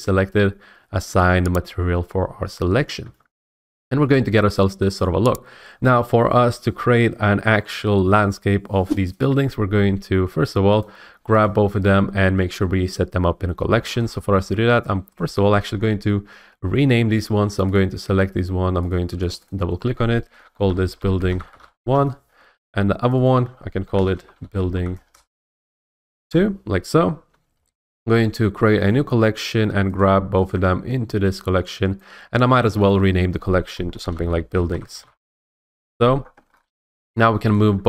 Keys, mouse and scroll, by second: 1.2 click, 3.0 Tab, 3.4-4.8 scroll, 4.8-5.2 scroll, 6.8 scroll, 10.8 shift+click, 11.4 shift+click, 13.7 scroll, 15.2 click, 15.7 scroll up 2, 17.7 click, 18.9 click, 19.3 click, 19.5 click, 20.6-21.8 typing, 21.9 Return, 23.1 click, 23.2 click, 23.8-24.9 typing, 26.2 Return, 28.9 click, 30.0 click, 32.0 click, 32.9 click, 33.0 click, 33.9-36.1 typing, 35.2 Return, 36.5-37.1 scroll, 37.1 click, 37.5 shift+click.